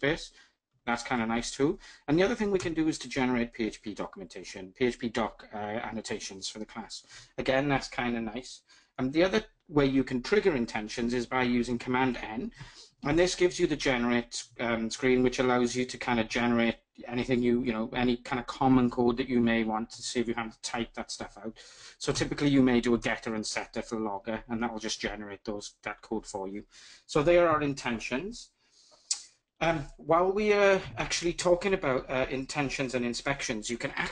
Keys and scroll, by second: 0.7 alt+Return, 11.3 super+n.